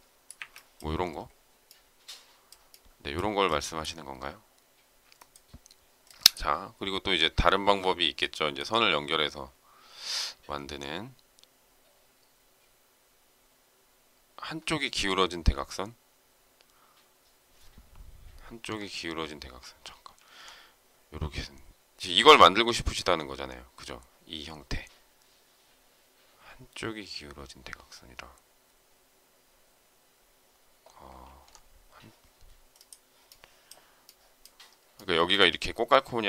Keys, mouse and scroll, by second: 0.3 Delete, 19.6 alt+Tab, 31.1 alt+Tab.